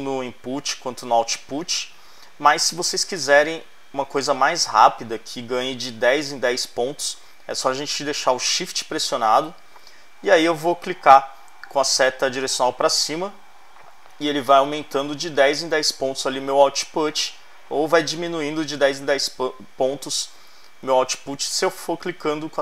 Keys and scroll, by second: 1.7 Right, 13.0 shift+Up, 15.2 shift+Up, 16.6 shift+Up, 20.2 shift+Down.